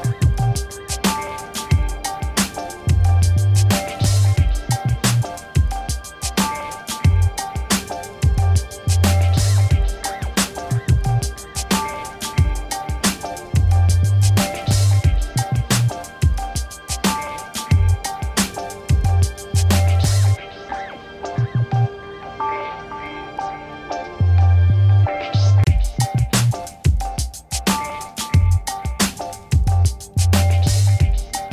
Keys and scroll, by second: 1.3 1, 1.5 3, 3.7 1, 4.0 7, 4.2 5, 5.5 Return, 15.4 ctrl++, 17.7 v, 18.7 ctrl+a, 19.1 v, 21.0 ctrl+d, 24.5 8, 25.2 Return, 28.4 t, 28.5 e, 28.8 x, 28.9 t, 30.7 space, 31.0 b, 31.3 o.